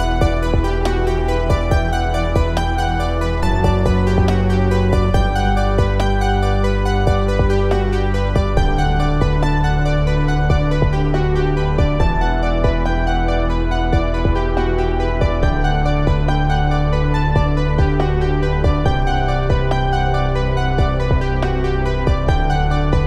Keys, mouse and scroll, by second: 2.1 click, 4.5-11.4 drag, 15.0 click, 15.4 ctrl+j, 20.4 click.